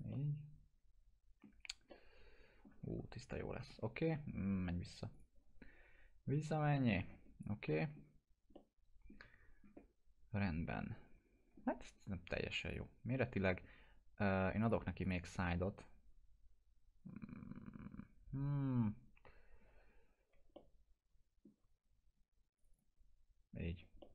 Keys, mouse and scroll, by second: 0.1-1.6 alt+middle drag, 1.6 scroll down 1, 1.9-2.8 alt+middle click, 3.0 ctrl+z, 5.2 click, 6.8 alt+middle click, 7.2 scroll up 1, 7.7 alt+middle click, 8.2 scroll up 1, 8.6-9.2 alt+middle drag, 10.7-11.7 alt+middle drag, 12.7 click, 20.4 click, 20.6-21.5 alt+middle drag, 22.6 click, 24.0-24.1 alt+middle drag.